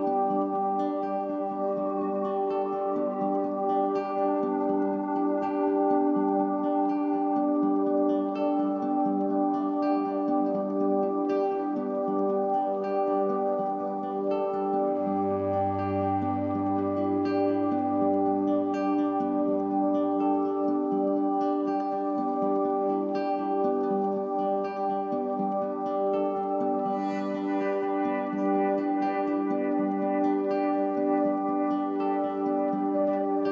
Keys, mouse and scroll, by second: 12.0-14.3 drag, 15.6 ctrl+scroll, 16.8-20.8 drag, 20.9 ctrl+scroll, 21.3 click, 22.4-24.1 ctrl+scroll, 24.1 click, 29.3 F9, 29.6 click.